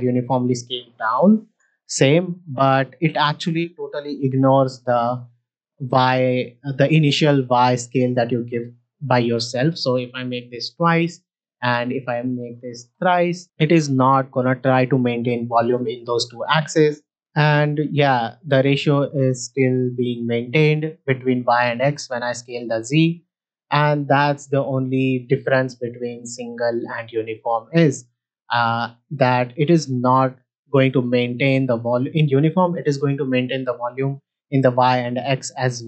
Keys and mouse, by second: 1.2 s, 1.4 z, 3.0-4.0 drag, 4.0 s, 4.1 y, 9.5-10.8 drag, 11.9 click, 17.2 z, 21.0-21.7 right drag, 21.7 s, 21.9 z, 23.5 right click, 24.2 middle drag, 26.1-26.9 drag.